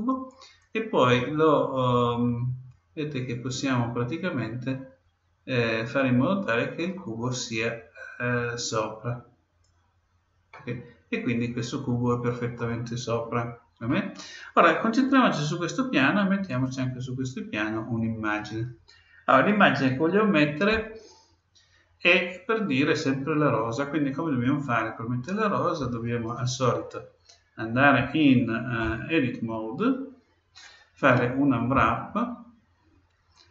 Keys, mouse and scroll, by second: 0.6-2.4 drag, 10.5-12.4 middle drag, 16.5-18.3 right drag, 18.4 right click, 27.9 Tab, 31.7 u.